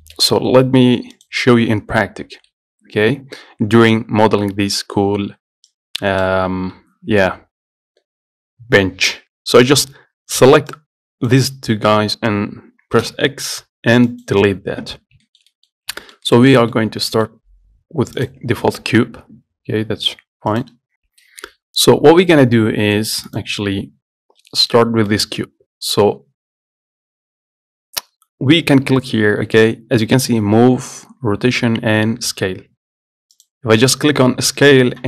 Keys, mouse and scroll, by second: 0.2 shift+middle click, 0.7 scroll down 1, 0.9 middle click, 1.4 click, 5.3-5.9 scroll down 2, 5.9-7.6 drag, 10.9-12.9 drag, 13.2 x, 15.2 scroll up 2, 15.5 shift+middle click, 15.9 scroll up 1, 16.2 shift+middle click, 17.1 scroll down 1, 17.4 middle click, 17.6 scroll up 2, 18.4 click, 24.4 scroll down 2, 24.6 middle click, 25.0 scroll up 2, 25.3-26.8 middle drag, 26.8-29.0 scroll down 1, 33.6-35.0 drag.